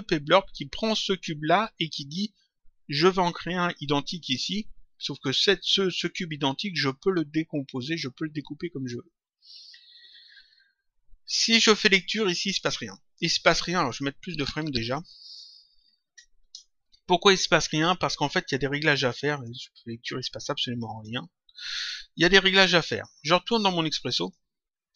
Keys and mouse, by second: 12.4 click, 13.8 click, 15.0 click, 16.4 Return, 17.6 click, 19.3 click, 20.9 click, 24.0 click.